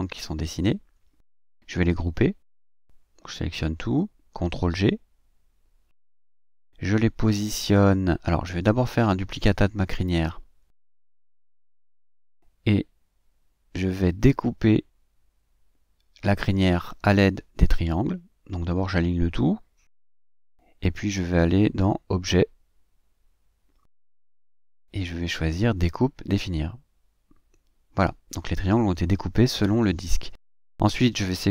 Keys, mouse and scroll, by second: 1.5 click, 2.4 click, 2.7-5.1 middle drag, 7.0 ctrl+g, 10.7 click, 13.3 ctrl+d, 15.0 click, 16.0 click, 16.7 shift+click, 19.0 click, 19.6 click, 23.2-24.0 scroll down 2, 24.0 scroll up 1, 24.2 scroll down 1, 24.5-25.3 scroll up 1, 26.0 click, 27.8 click, 30.2 click, 31.0-31.5 drag.